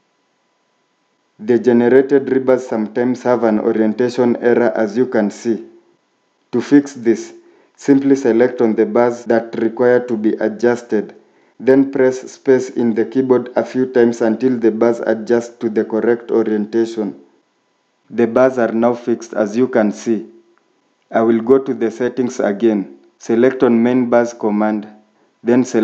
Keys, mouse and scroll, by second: 2.1 scroll up 1, 10.1 ctrl+click, 12.5 ctrl+click, 13.9 space, 20.1 Escape.